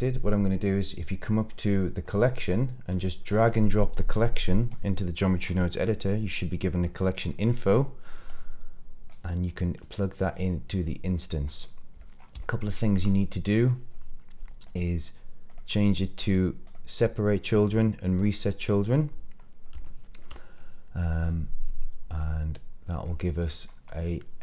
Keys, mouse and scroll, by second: 1.9 click, 2.8 click, 5.3 scroll up 2, 5.6 middle click, 6.3-6.8 drag, 7.1 scroll up 1, 7.3 middle click, 9.0-10.2 drag, 11.0 scroll down 3, 11.4-11.9 middle drag, 12.1 scroll up 1, 12.3-12.9 shift+middle drag, 13.0-13.6 middle drag, 14.6 click, 15.4 click, 16.1 click, 16.6 click, 17.5 click, 18.5 scroll down 1, 18.7-19.3 middle drag, 19.5 scroll up 1, 19.8-20.1 shift+middle drag, 20.5-20.9 middle drag, 22.1 click, 23.0-23.4 middle drag, 23.5 scroll up 2, 23.8-24.4 middle drag.